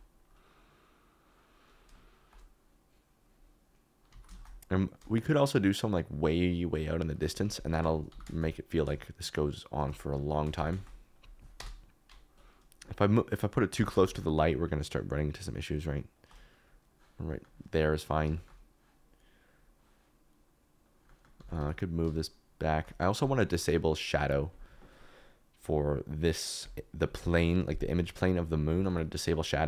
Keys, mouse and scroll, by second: 4.1 alt+d, 4.3 shift+z, 7.4 Escape, 8.0 g, 8.2 shift+z, 9.9 KP_Decimal, 10.1 middle click, 10.5 g, 10.7 shift+z, 11.5 KP_0, 13.7 g, 13.9 shift+z, 17.2 middle click, 20.8 click, 21.0 middle click, 21.3 g, 21.5 y, 23.1 click, 24.2 click, 26.6 click, 27.8 click, 28.7 g, 28.8 y.